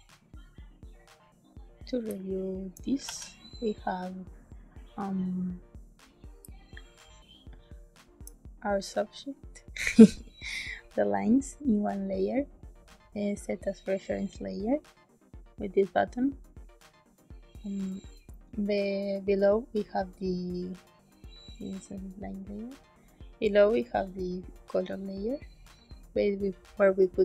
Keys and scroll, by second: 2.0 space, 3.0 ctrl+s, 6.3 space.